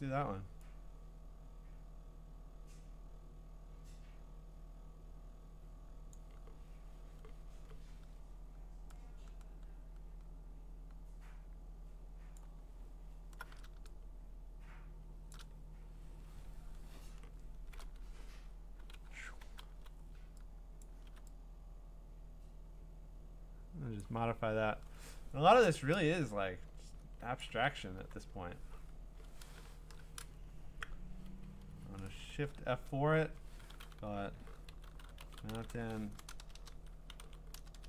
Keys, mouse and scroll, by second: 0.5 click, 6.1-12.2 drag, 15.3 shift+click, 16.6 scroll, 17.3-17.8 scroll, 19.0-21.1 typing, 20.8 click, 24.0 click, 24.5-25.0 scroll, 27.4 click, 28.0 q, 29.8 F5, 32.1 Escape, 32.3 F4, 34.5-37.8 typing.